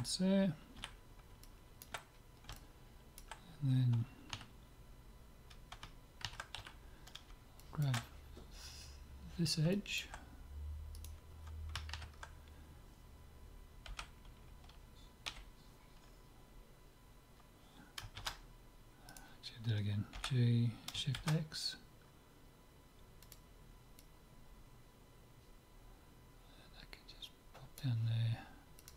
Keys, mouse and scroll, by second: 0.7 z, 1.4-4.2 middle drag, 4.3 KP_3, 6.7 z, 7.6-9.3 middle drag, 9.7-12.3 middle drag, 11.0 click, 12.3 right click, 13.9 g, 20.2 g, 24.0-26.0 drag, 28.8-28.9 drag.